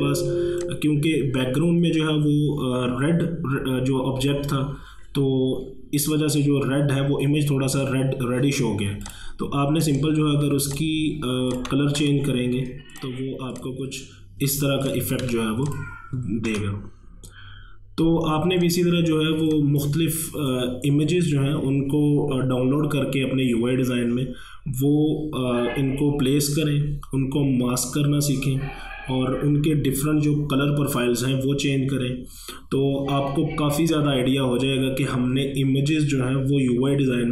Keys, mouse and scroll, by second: 0.5 space, 0.7 click, 1.0 space, 9.1 click, 12.0 a, 13.0 click, 15.3 v, 15.7 click, 16.5 ctrl+1, 18.5 space, 18.7 click, 19.0 space.